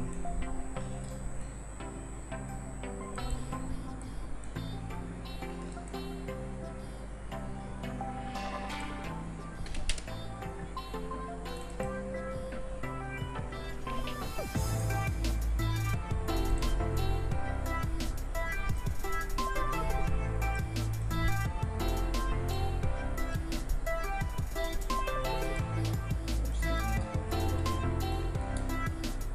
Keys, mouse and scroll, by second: 1.7 s, 4.3-5.7 drag, 5.7 ctrl+s, 11.6 ctrl+s, 25.4 ctrl+s.